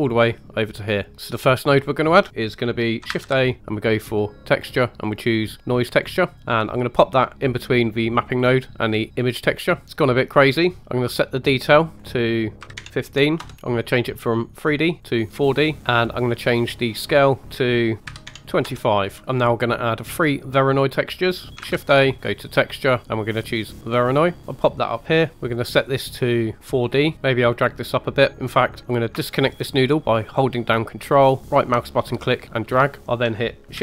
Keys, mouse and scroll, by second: 3.0 shift+a, 8.2 click, 9.8-10.6 scroll up 4, 10.6 scroll up 1, 11.8 click, 13.7-15.3 drag, 16.9-18.7 drag, 19.9 middle click, 21.5 shift+a, 24.7 click, 25.3 middle click, 25.3 scroll up 3, 25.7-26.7 drag, 27.1 click, 27.1 middle click, 31.4-32.7 ctrl+right drag, 33.1 click, 33.7 shift+d.